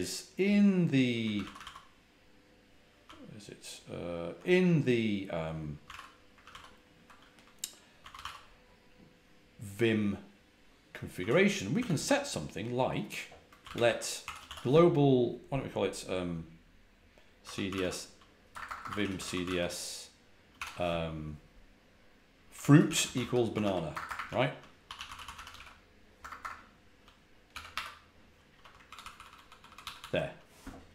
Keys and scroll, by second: 1.3 ctrl+a, 1.3 ctrl+l, 1.5 ctrl+a, 1.5 ctrl+l, 2.9 ctrl+a, 3.0 ctrl+l, 5.5-6.3 typing, 6.3 ctrl+a, 6.4 ctrl+l, 7.8-8.6 typing, 11.1-11.9 typing, 13.3-14.2 typing, 17.1-19.9 typing, 22.1-26.3 typing, 27.6 Escape, 28.8 ctrl+e, 28.9 ctrl+e, 29.1 ctrl+e.